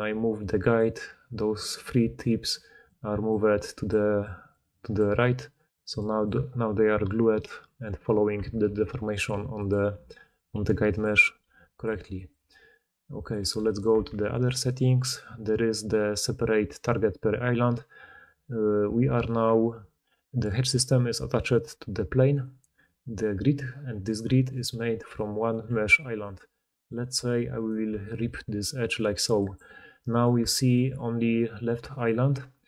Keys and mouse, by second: 0.6-2.7 middle drag, 1.9-6.2 typing, 2.7-8.2 drag, 6.3-8.2 middle drag, 6.3-8.2 right drag, 7.3 d, 7.5 d, 8.2 Tab, 8.6-12.2 typing, 13.3 r, 13.8 Tab, 14.5-19.2 middle drag, 19.2 click, 19.3-22.3 middle drag, 22.7 click, 24.0 click, 24.2 Tab, 24.4 click, 24.7 4, 25.6 g, 25.8-27.4 middle drag, 27.4 alt+click, 27.6-31.9 alt+middle drag, 28.1 v, 30.3 Tab, 31.7-32.6 d, 31.9-32.6 drag.